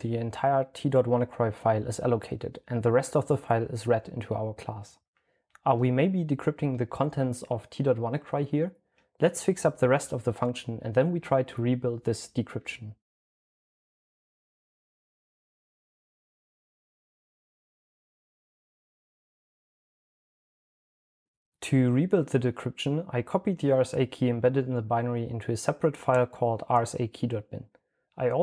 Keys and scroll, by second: 0.0-0.1 typing, 3.0-4.6 typing, 6.7-10.1 typing, 12.3-16.7 typing, 14.6 Return, 19.1-21.0 typing.